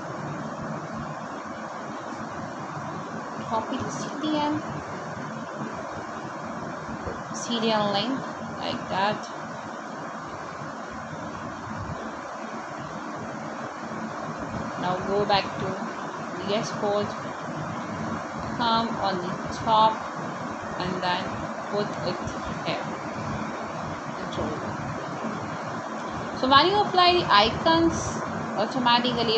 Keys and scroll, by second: 8.3 ctrl+v, 21.0 BackSpace, 23.7-25.3 typing, 26.4 space, 27.1 f, 27.3 a.